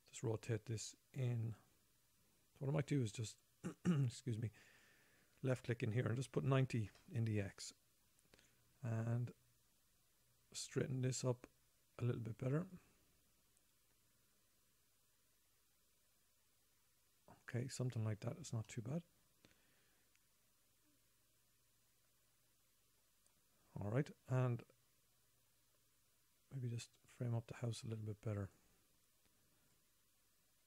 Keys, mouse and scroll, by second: 5.0 click, 7.3 click, 9.8 click, 19.0 middle click, 22.4 middle click, 22.6 middle click, 27.2 click, 30.1 click.